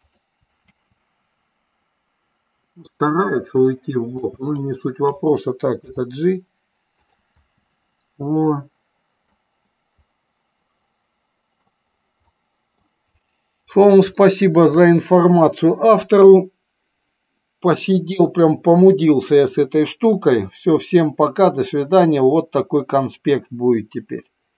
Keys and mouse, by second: 0.7 space, 4.3 space, 4.7-5.2 drag, 5.9 g, 7.1 click, 7.4 space, 9.3-11.7 middle drag, 12.3 middle click, 14.3 shift+middle click.